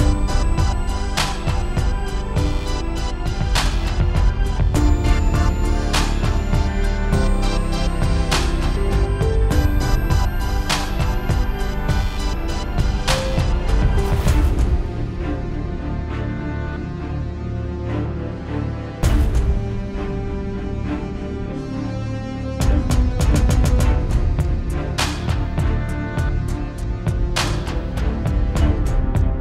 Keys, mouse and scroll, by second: 0.1 shift+middle click, 0.5 scroll up 3, 1.2 shift+a, 1.8 Tab, 3.4 click, 3.5 scroll down 6, 3.7-4.1 scroll up 2, 5.9 s, 6.4 scroll down 2, 6.7 Tab, 7.2 click, 7.8 middle click, 8.0 Tab, 8.8 s.